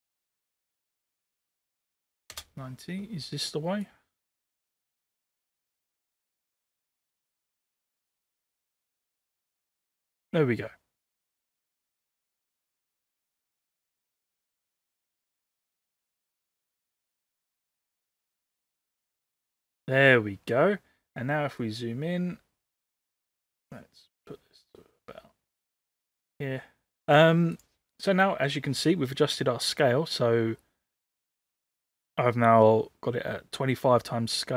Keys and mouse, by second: 0.1 ctrl+z, 0.3-1.4 drag, 1.5 click, 3.9-12.0 drag, 12.6-18.8 drag, 21.6-26.3 drag.